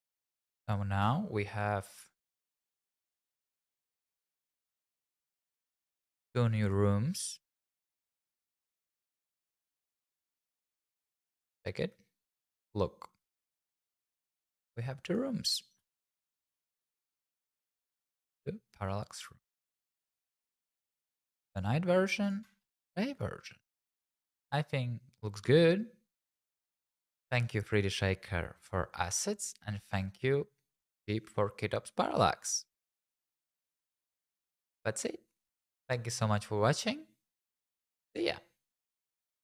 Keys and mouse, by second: 1.0 n, 2.9-4.0 drag, 4.5-5.6 drag, 5.8 click, 8.2 click, 8.9 click, 9.5 g, 9.6 x, 11.5 click, 15.0 click, 15.8 n, 16.7 middle click, 21.5 click, 23.0 middle click.